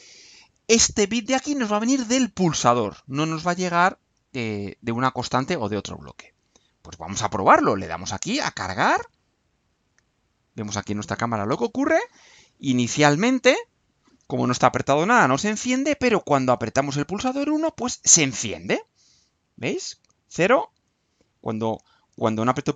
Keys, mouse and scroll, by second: 8.4 click, 10.0 click.